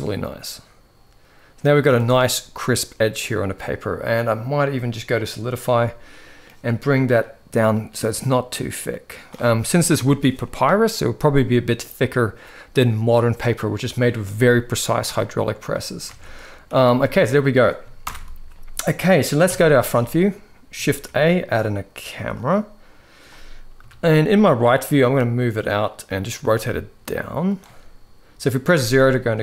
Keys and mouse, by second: 1.8-2.2 middle drag, 5.8 middle click, 7.0-9.0 shift+drag, 9.5 shift+middle drag, 15.2 middle click, 15.8 alt+a, 16.2 middle drag, 16.6 ctrl+s, 16.9-17.2 middle drag, 17.8 shift+Left, 19.2 KP_1, 19.8-20.5 shift+middle drag, 20.6 shift+a, 23.5 KP_3, 24.7 g, 26.1 r, 28.5 KP_0.